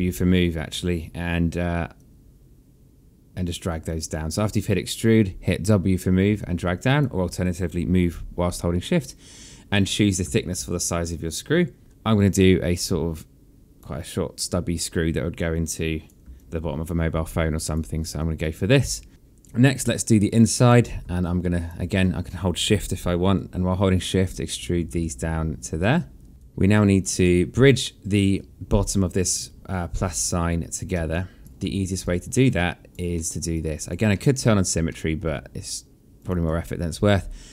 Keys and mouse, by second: 1.5 click, 6.0 alt+click, 9.9 alt+click, 14.0 click, 15.9 alt+click, 17.7 alt+click, 20.0 click, 20.7 alt+click, 22.9 shift+click, 26.3 alt+click, 26.8 alt+middle click, 27.7 alt+click, 30.7 alt+click, 31.6 alt+click, 32.7 alt+middle click, 33.1 alt+click, 33.7 alt+middle click, 34.5 alt+middle click, 35.8 click.